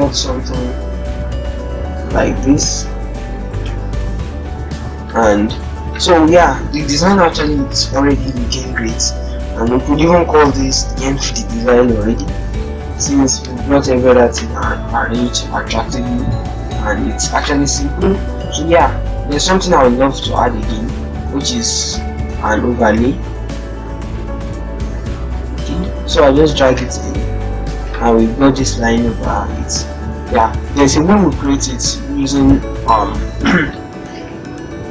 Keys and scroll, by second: 1.6 Down, 2.3 alt+Tab, 6.4 alt+Tab, 19.0 alt+Tab, 33.7 ctrl+-, 34.0 ctrl+0, 34.7 ctrl+-.